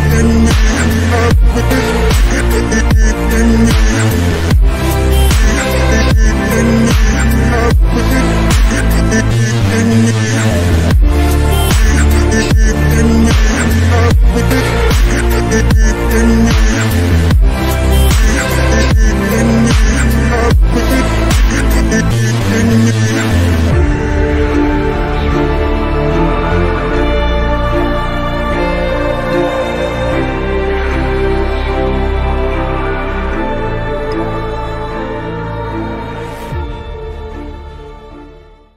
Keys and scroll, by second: 1.8 F3, 2.0 Escape, 4.1 F4, 15.3 ctrl+z, 16.7 shift+F2, 18.6 F3, 19.7 F4, 21.4 shift+Page_Up, 23.2 shift+F2, 23.7 F3, 24.0 Escape, 33.3 F3, 33.6 Escape, 35.1 F9.